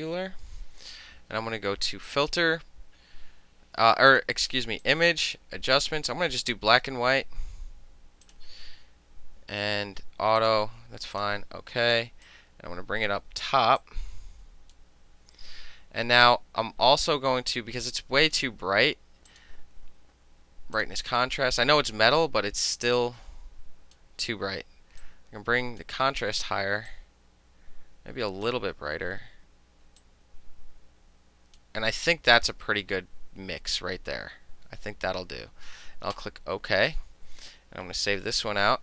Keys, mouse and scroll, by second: 0.0-0.7 typing, 2.1 click, 4.2 click, 4.9 click, 5.8 click, 8.3 click, 10.5 click, 11.2 click, 12.3 click, 13.1 middle click, 13.9 click, 14.8-18.3 middle drag, 18.3 click, 18.4-19.4 middle drag, 19.4 click, 19.5-20.8 middle drag, 20.8 click, 20.9-22.8 middle drag, 22.8-24.0 drag, 24.0-25.1 middle drag, 25.1-25.9 drag, 25.9-27.0 middle drag, 27.0-28.5 drag, 28.5-30.1 middle drag, 30.1-31.6 drag, 31.6-36.2 middle drag, 36.2 click, 36.3-37.9 middle drag, 38.0 ctrl+shift+s.